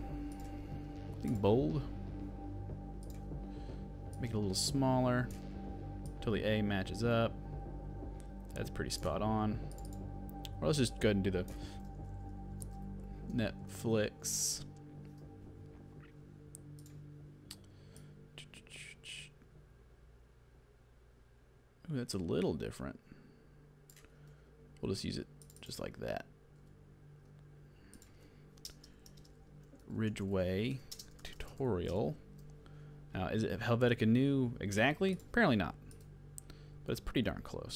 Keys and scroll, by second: 12.4-14.5 typing, 24.3 super+z, 26.1 super+z, 29.5-32.4 typing.